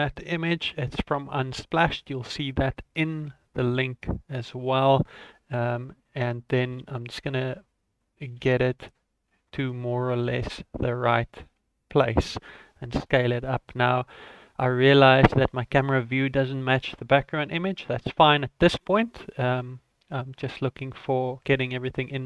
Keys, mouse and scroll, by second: 1.1 s, 5.7 shift+middle click, 6.7 r, 8.4 g, 12.5 s, 17.8 ctrl+middle click, 20.7 ctrl+s, 20.7 shift+middle click, 21.6 shift+middle click.